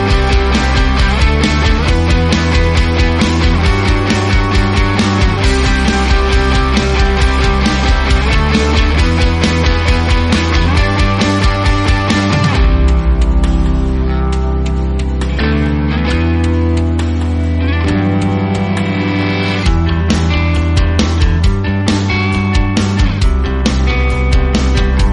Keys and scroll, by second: 0.0-2.2 typing, 5.2 shift+d, 5.7 a, 6.4 f, 7.7 typing, 8.8 g, 10.8-13.0 typing, 11.7 Tab, 12.7 ctrl+r, 12.7 Escape, 14.0 ctrl+z, 14.5 s.